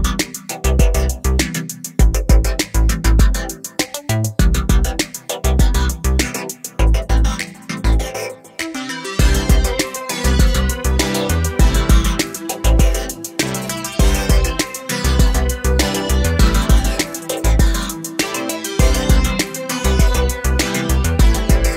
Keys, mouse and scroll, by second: 0.1 click, 1.9 click, 3.1 scroll up 1, 3.3 scroll down 1, 4.0-4.3 scroll up 1, 4.6 scroll up 1, 5.2 scroll down 1, 5.8 click, 6.6 click, 8.4 scroll up 1, 10.1 Page_Down, 11.7 scroll down 1, 12.9 click, 14.2 ctrl+o, 15.3 scroll down 1, 17.9 scroll down 1, 18.7 click, 19.6 click, 20.0 scroll down 1, 21.3 click.